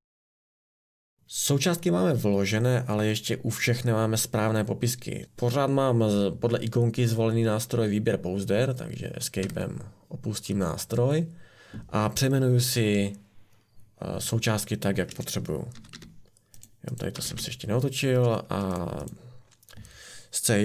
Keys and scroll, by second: 1.2 Escape, 9.4 Escape, 15.7 r, 15.9 r, 17.1 r, 17.3 r.